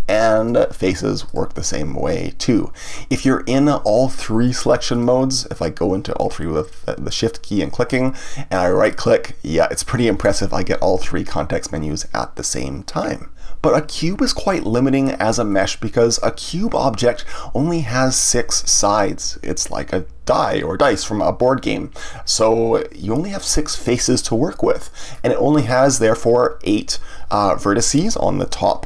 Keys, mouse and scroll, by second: 0.3 click, 1.2 click, 2.0-4.4 right drag, 4.4 click, 4.9 shift+click, 5.5 shift+click, 8.9-15.5 right drag, 15.5-18.5 middle drag, 19.1-22.2 middle drag, 22.3-25.3 middle drag.